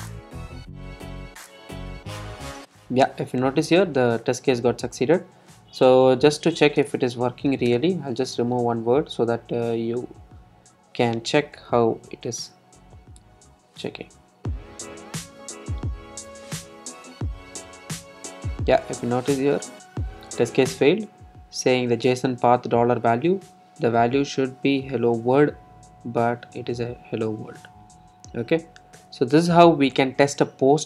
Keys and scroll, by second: 9.8 super+r.